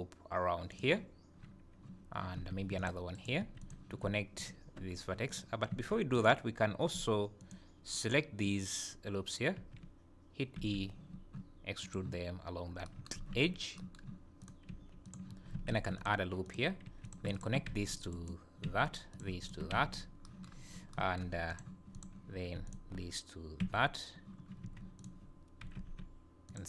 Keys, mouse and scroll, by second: 2.5 ctrl+r, 3.4 2, 3.6 click, 4.4 shift+click, 5.3 click, 5.7 1, 6.1 click, 7.4 click, 9.5 e, 12.6 scroll up 1, 13.1 scroll up 4, 14.4 click, 14.8 g, 15.7 ctrl+r, 16.8 2, 17.0 click, 17.3 shift+click, 17.7 g, 18.6 f, 19.1 click, 19.4 shift+click, 19.7 f, 20.5 scroll down 3, 21.5 click, 22.0 click, 22.6 shift+click, 23.6 f, 24.6 1, 24.9 click, 25.7 g.